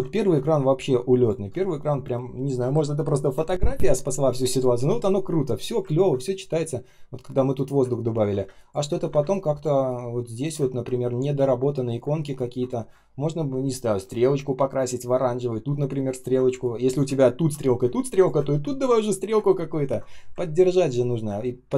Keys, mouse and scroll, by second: 0.2 space, 0.7 space, 0.8 space, 5.8 ctrl+scroll up 1, 7.9 ctrl+scroll down 1, 8.3 space, 8.9 ctrl+scroll up 1, 9.1 space, 9.6 space, 9.6 space, 10.6 ctrl+scroll up 1, 12.3 ctrl+scroll down 1, 12.9-13.5 ctrl+scroll up 1, 14.9-15.3 ctrl+scroll down 1, 15.3-15.6 ctrl+scroll up 1, 16.0-16.4 ctrl+scroll down 1, 16.4 space, 16.9 space, 17.1-17.4 ctrl+scroll down 1, 17.5 space, 18.2 space, 18.4-19.2 ctrl+scroll up 1, 19.4 ctrl+scroll down 1, 20.3 ctrl+scroll up 1, 20.8 ctrl+scroll down 1, 21.4 ctrl+scroll up 1.